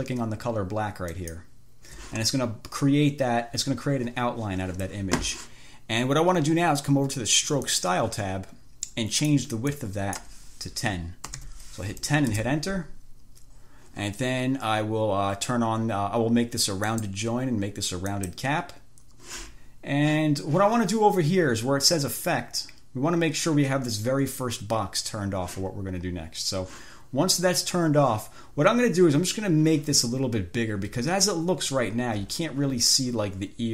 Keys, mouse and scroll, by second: 1.4 shift+click, 7.9 click, 9.4 click, 10.0 click, 11.3-12.2 typing, 12.6 Return, 17.2 click, 18.4 click, 31.8-32.4 ctrl+scroll up 2.